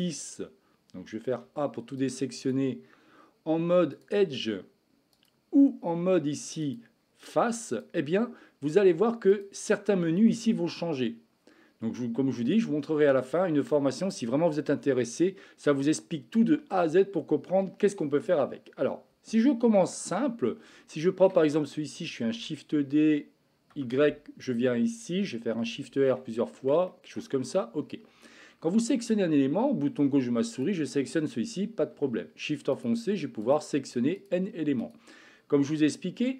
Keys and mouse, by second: 1.3 a, 2.2 click, 3.8 click, 6.5 click, 7.6 click, 9.3-11.5 drag, 12.4-13.5 middle drag, 19.8 Tab, 20.9-21.3 shift+middle drag, 21.5 middle drag, 22.3 shift+d, 25.6 shift+r, 25.8 shift+r, 26.1 shift+r, 26.8-27.2 shift+middle drag, 30.5-32.1 drag, 32.8-33.5 shift+drag, 34.1 shift+click, 34.8 shift+click, 35.8-36.3 middle drag.